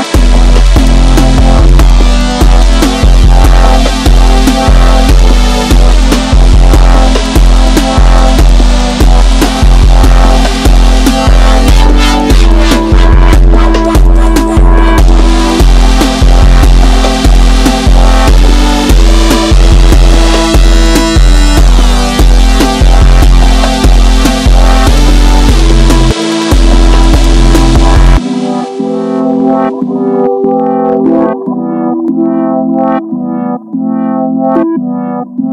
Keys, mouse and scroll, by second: 0.0 KP_1, 3.1 click, 16.7 click, 19.0 middle click, 19.8 Tab, 20.1 scroll down 2, 20.3-20.9 middle drag, 20.9 scroll down 1, 21.1 KP_1, 21.7-22.1 shift+middle drag, 22.1-22.4 scroll up 2, 22.4-23.4 middle drag, 23.4 scroll down 1, 23.5 KP_1, 24.1-27.2 shift+middle drag, 27.2 KP_1, 27.6-29.6 shift+middle drag, 29.6-30.2 scroll up 2, 30.2-30.8 scroll up 1, 30.8 Tab, 32.4 click, 34.0 click.